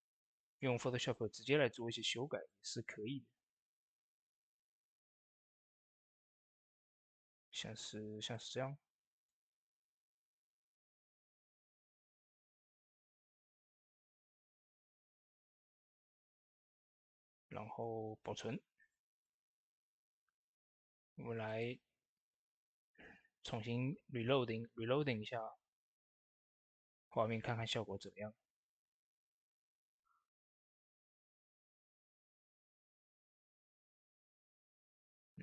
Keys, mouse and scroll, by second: 17.7 ctrl+s, 19.1 click, 21.3 click, 35.3 click, 35.3 click.